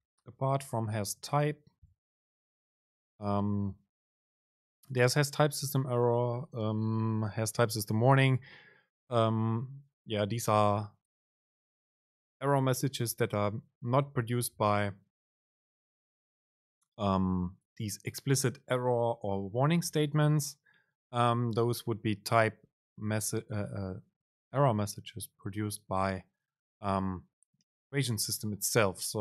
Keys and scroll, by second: 0.3 shift+Right, 2.4 BackSpace, 2.8 super+space.